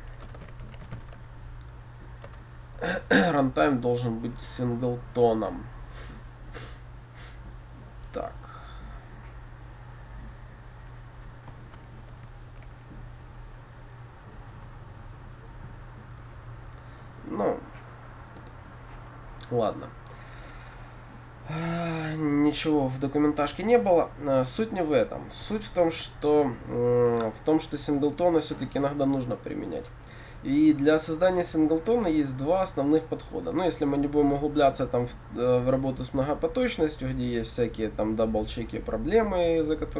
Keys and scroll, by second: 2.3 Return, 4.6 Return, 4.8 ctrl+b, 11.9 ctrl+f, 26.0 ctrl+y.